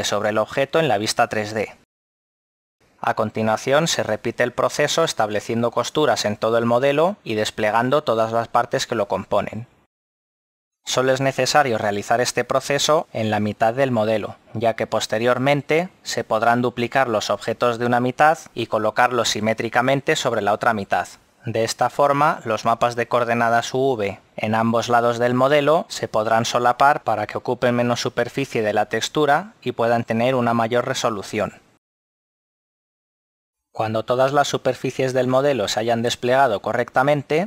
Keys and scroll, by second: 5.1 Tab.